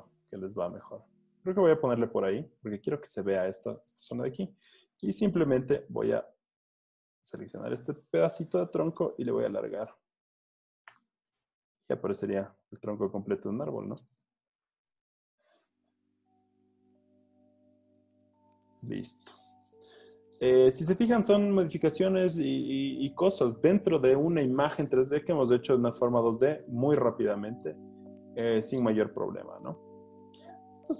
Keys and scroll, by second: 5.6 m, 8.4 super+t, 11.0 Return, 11.5 super+d, 12.0 z, 14.0 c, 14.3 v, 14.7 Tab, 15.2 Tab, 17.6 z, 19.7 z, 28.0 z, 29.7 z.